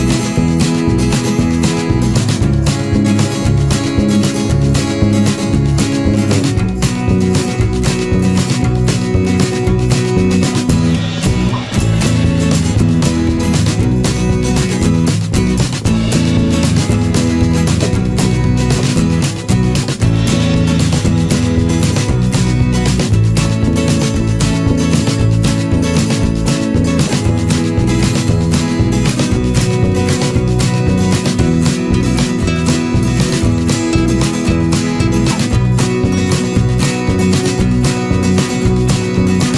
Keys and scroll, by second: 24.8 Return.